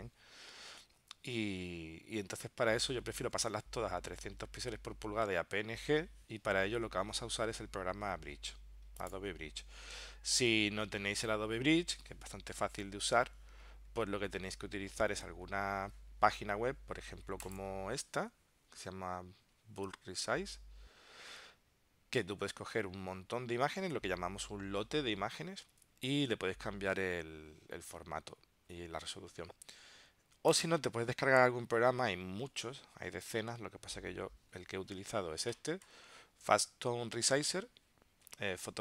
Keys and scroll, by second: 14.2 super+Tab.